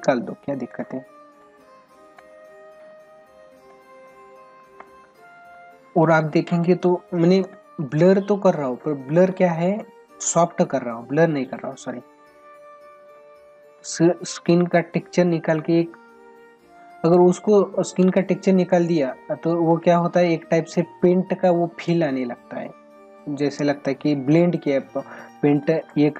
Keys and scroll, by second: 7.4 space, 17.3 space.